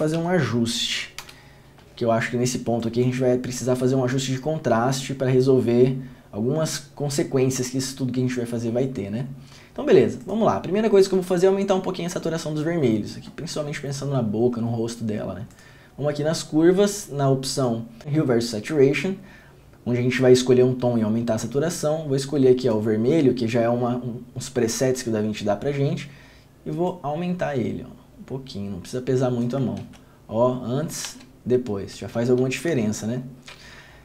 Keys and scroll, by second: 0.1 d, 1.4 Return, 30.0 ctrl+d, 32.6 ctrl+d.